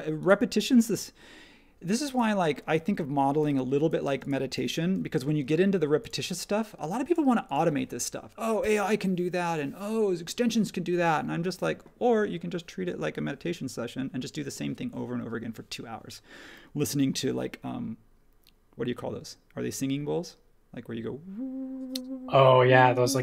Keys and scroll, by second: 3.4 p, 4.0 space, 5.2 space.